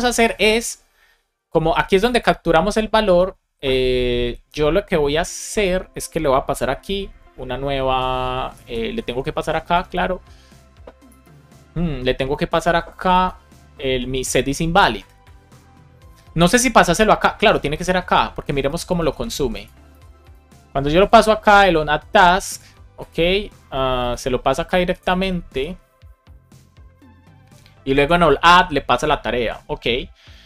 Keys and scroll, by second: 6.7 space, 8.4 BackSpace, 9.6 space, 10.9 BackSpace, 19.0 super+s, 19.8 super+s.